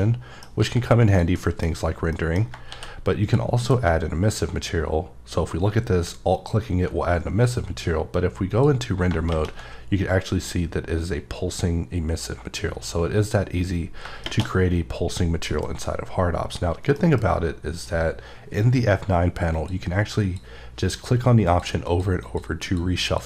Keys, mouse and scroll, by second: 0.6 g, 1.1 click, 1.4 middle click, 1.8-2.1 scroll up 2, 2.1 middle click, 2.4 scroll down 2, 2.7 d, 3.2 click, 3.6 m, 6.3 click, 14.0 shift+Num_Lock, 15.5 alt+m, 19.6 click, 20.2 click, 21.1 click, 21.4 click, 21.9 click, 22.6 click, 23.0 click.